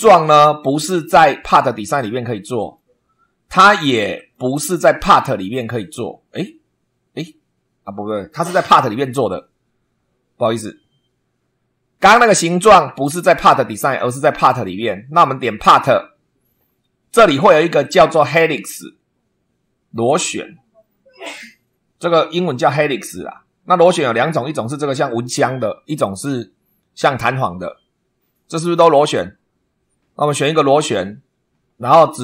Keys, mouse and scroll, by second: 0.0 super+2, 2.5 click, 4.1 click, 15.6 click, 17.8 click, 30.3 click.